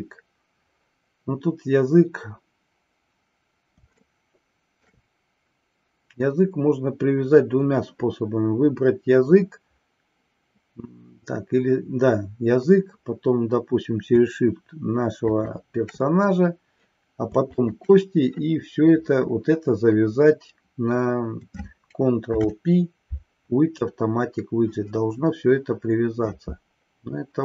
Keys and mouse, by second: 4.2-5.1 shift+middle drag, 15.3 shift+click, 17.5 shift+click, 22.2 ctrl+p.